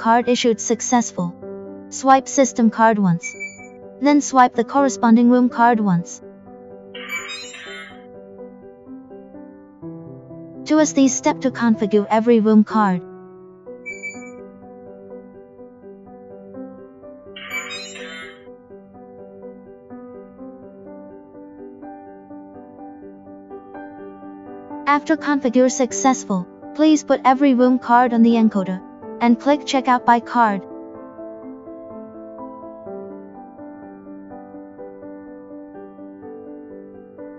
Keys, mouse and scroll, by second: 31.6 click, 34.5 click, 35.6 click, 37.2 click.